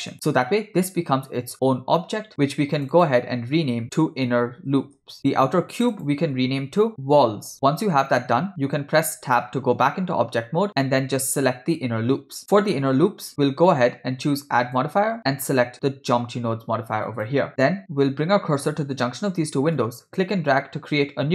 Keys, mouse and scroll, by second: 2.8 click, 2.9-5.2 drag, 4.5 n, 5.2 o, 5.8 click, 5.9-7.5 drag, 7.3 l, 9.3 Tab, 10.7 click, 14.6-17.4 drag, 19.8-21.3 drag.